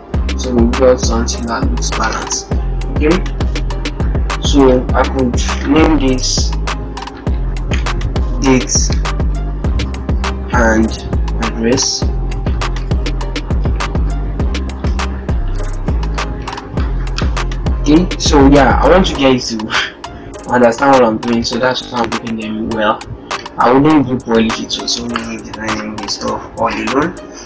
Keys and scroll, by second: 5.0 ctrl+g, 8.4 shift+d, 10.2 shift+8, 12.0 shift+7, 12.7 shift+Caps_Lock, 14.8 a, 21.8 ctrl+-.